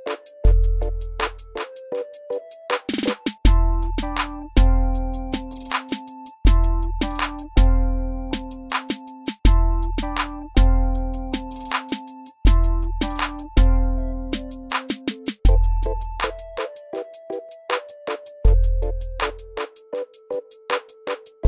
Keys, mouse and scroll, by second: 2.7 click, 5.5 click, 5.9 x, 6.4-8.1 drag, 10.6 ctrl+m, 11.9 shift+right click, 13.0 click, 16.0 click.